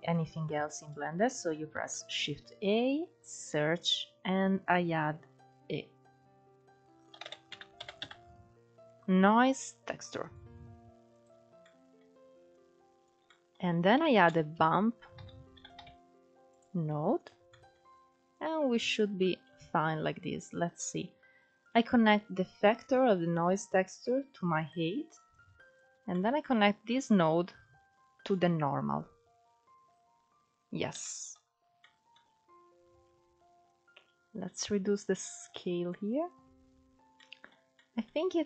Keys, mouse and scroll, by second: 15.9 shift+a, 17.6-24.0 drag, 24.6-29.0 drag, 29.0-29.5 scroll down 3, 29.5-30.4 scroll up 2, 30.4-33.2 middle drag, 33.2-35.5 drag, 35.5-36.5 scroll down 1, 36.5-38.4 scroll down 3, 38.4 click.